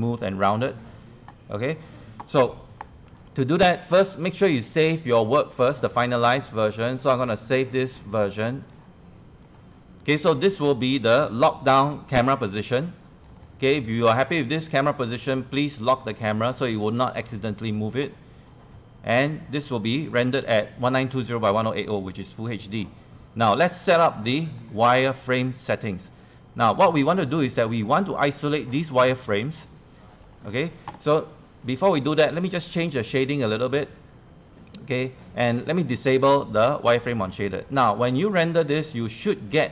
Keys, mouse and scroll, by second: 3.6 click, 8.3-39.7 drag.